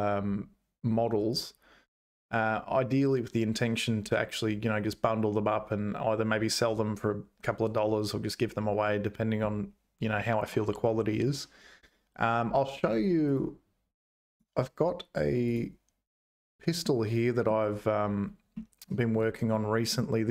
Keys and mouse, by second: 13.2-15.8 drag, 16.8 middle click, 18.5 middle click, 19.5 middle click.